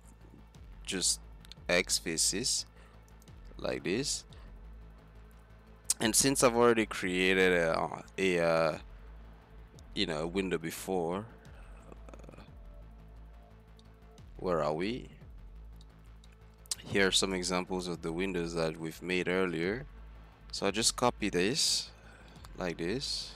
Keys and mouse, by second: 4.4 middle click, 5.4 Tab, 6.6 KP_Divide, 7.9 KP_Divide, 12.2 `, 13.1 z, 17.2-19.5 right drag, 19.7 z, 20.3 z, 22.2 shift+d.